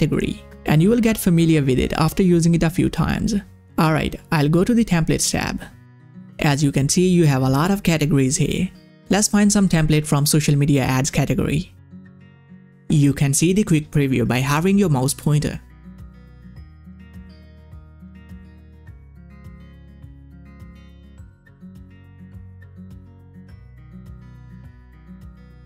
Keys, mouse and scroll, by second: 2.9 click, 6.2 click, 10.9-13.1 scroll up 1, 13.1 click, 14.5-22.3 scroll down 1, 22.8-25.4 scroll down 1.